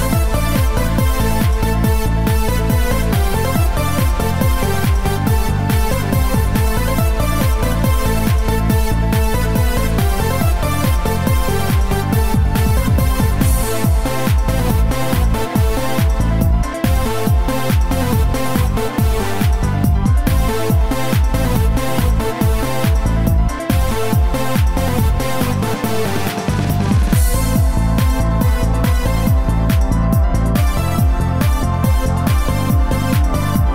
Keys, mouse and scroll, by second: 7.4 right click, 9.6 click, 17.2-17.6 scroll up 2, 17.6-18.6 scroll down 4, 19.4 middle click, 28.6 right click, 30.2 shift+d.